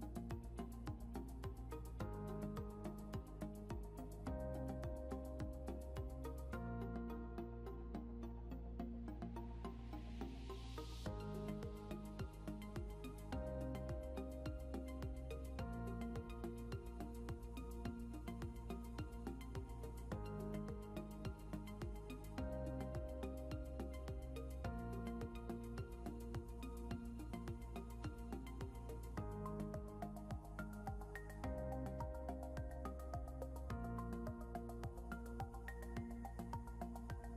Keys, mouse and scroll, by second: 3.1 scroll up 1, 9.3 double click, 19.4 scroll up 1, 24.6 scroll down 1, 28.3 ctrl+z, 28.7 ctrl+z, 29.3 ctrl+z, 30.3-30.6 scroll up 1, 36.4 scroll, 36.4 scroll down 1.